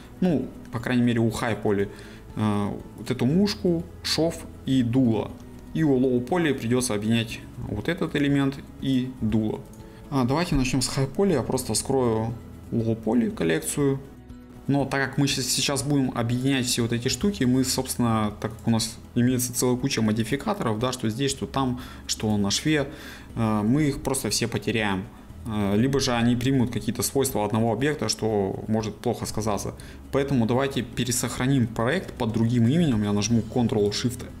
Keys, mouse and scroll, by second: 3.1 click, 7.7 g, 8.9 click, 9.2 g, 9.7 right click, 14.2 middle click, 14.5 click, 14.5 ctrl+z, 16.5 click, 17.1 g, 17.6 right click, 30.3-30.9 scroll down 1, 30.9-34.4 shift+middle drag.